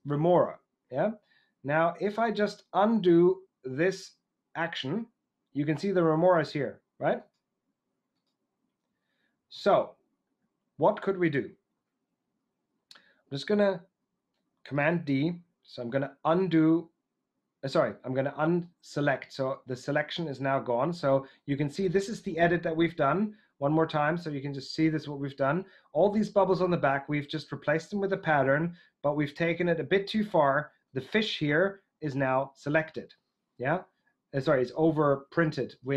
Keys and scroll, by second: 14.8 super+d.